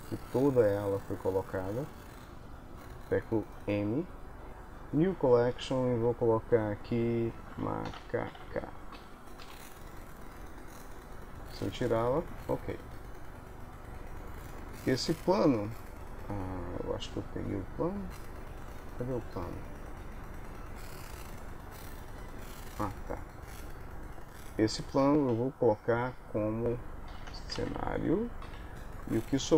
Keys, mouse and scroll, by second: 2.5 KP_1, 3.6 m, 11.5 click, 14.8 middle click, 17.9 click, 20.8 middle click, 21.8 click, 22.5 middle click, 23.5 click, 24.2 click, 25.3 m.